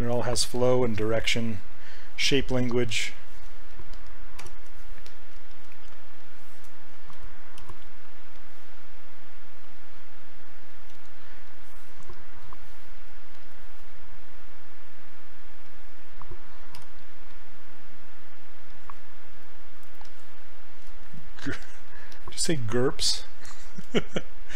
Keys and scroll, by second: 4.5 w, 7.7 w, 16.8 r.